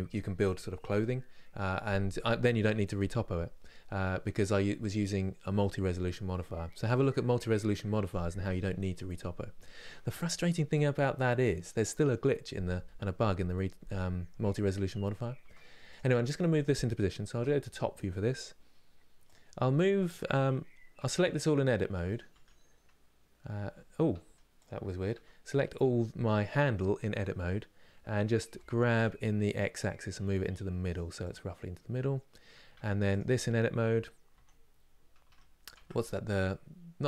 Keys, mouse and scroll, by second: 15.1 Tab, 15.6 click, 15.9-17.0 middle drag, 17.0 KP_7, 18.9 click, 22.0 Tab, 23.2 a, 23.8 Tab, 24.3 click, 24.8 Tab, 32.8 click, 34.9 Tab, 35.3 click, 35.4 Tab, 35.7 click.